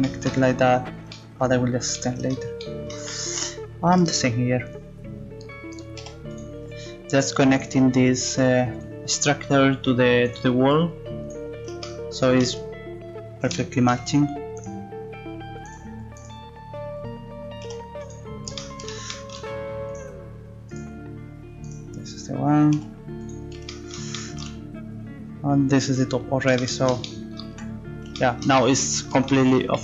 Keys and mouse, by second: 4.7-6.8 right drag, 6.0 g, 7.5-11.2 right drag, 8.3 g, 10.7 g, 14.6-17.4 right drag, 17.6 g, 22.7 g, 26.3 middle click, 27.5 z.